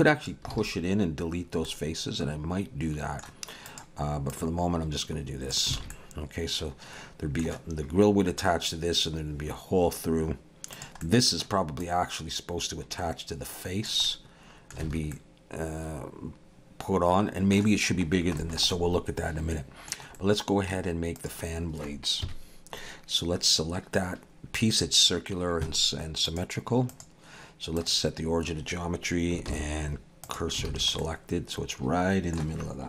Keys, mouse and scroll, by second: 0.5 alt+a, 1.4-2.0 scroll down 2, 1.6 middle click, 3.7 click, 4.3 click, 5.8 alt+a, 5.9 middle click, 10.7 click, 11.0 middle click, 11.8 click, 14.1 middle click, 14.9 alt+a, 15.1 middle click, 18.1 scroll down 2, 18.4 shift+middle click, 18.7 middle click, 20.2 middle click, 20.5 shift+middle click, 21.2 click, 22.2 KP_1, 26.3 click, 29.5 shift+s, 30.7 alt+a, 31.0 middle click.